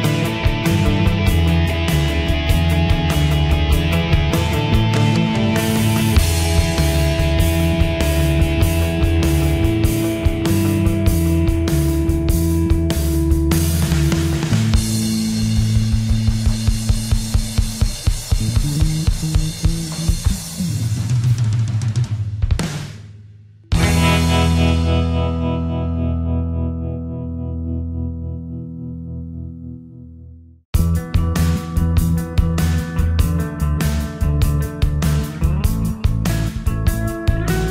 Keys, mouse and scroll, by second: 4.0 ctrl+z, 5.8 alt+click, 7.0 ctrl+g, 7.9-11.9 drag, 12.2-16.5 drag, 18.8 click, 20.8 Tab, 26.0 click, 26.2-36.1 drag, 36.6-37.7 drag.